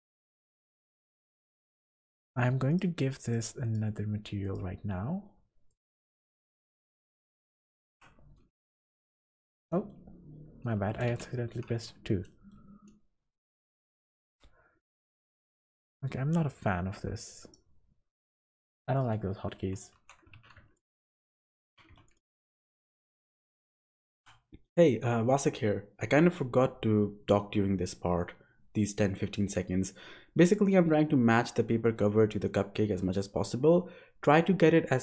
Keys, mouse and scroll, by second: 0.7 Tab, 1.0-1.9 scroll up 3, 1.3 middle click, 2.7 click, 3.2 click, 3.7 click, 4.4 click, 5.7 click, 6.4 click, 7.8 click, 8.6 2, 9.3 scroll down 5, 9.6 scroll up 1, 9.7 middle click, 10.1-11.0 scroll down 7, 11.1 2, 11.4 scroll up 5, 11.7 1, 12.3 middle click, 12.8 scroll down 4, 13.0-14.0 scroll up 1, 14.9 click, 15.6 click, 18.0 scroll down 1, 18.0-19.0 scroll up 12, 18.9 click, 19.3 middle click, 19.5 Tab, 19.9 2, 20.3 alt+a, 20.7 alt+shift+click, 21.6 alt+a, 22.0 alt+shift+click, 22.8 s, 24.6 g, 26.4 s, 29.2 g, 30.5 s, 31.6 g, 32.8 s.